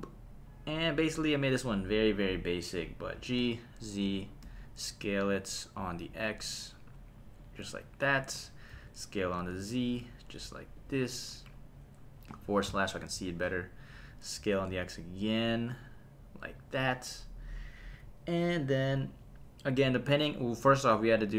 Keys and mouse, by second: 3.4 g, 3.4 z, 4.1 click, 4.4 s, 5.8 x, 7.7 click, 8.7 s, 9.2 z, 10.7 click, 12.3 /, 14.4 s, 14.7 x, 16.5 click, 17.4 click.